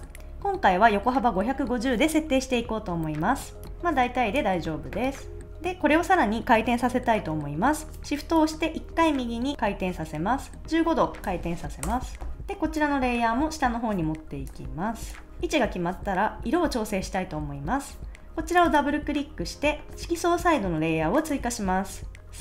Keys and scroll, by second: 11.8 Return.